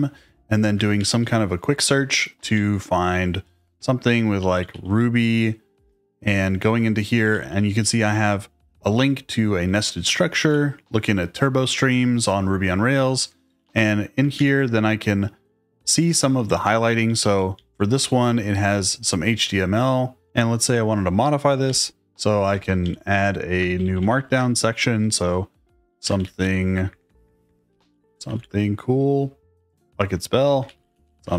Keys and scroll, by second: 0.7-1.5 typing, 2.5 Up, 2.7 Page_Up, 4.1-5.1 typing, 5.7 Return, 7.1-8.0 typing, 10.1-10.8 typing, 13.4 j, 13.5 j, 14.3 shift+g, 15.5-17.8 typing, 20.2 k, 21.6 shift+o, 22.4 Return, 22.8 Up, 23.7 shift+3, 23.9 shift+3, 24.0 shift+3, 24.4 space, 25.6-28.4 typing, 29.5 ctrl+w, 30.2-31.3 typing.